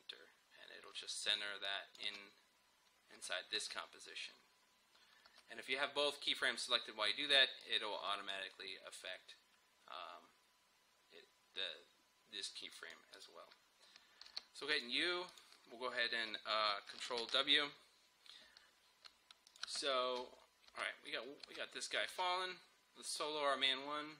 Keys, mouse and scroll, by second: 1.7 click, 2.1 space, 5.9-8.6 drag, 8.6-10.8 scroll down 1, 12.8 click, 14.3 u, 14.8 click, 17.2 ctrl+w, 19.5 click, 19.7 space, 21.1-21.5 scroll up 1, 21.5 space, 23.1 click.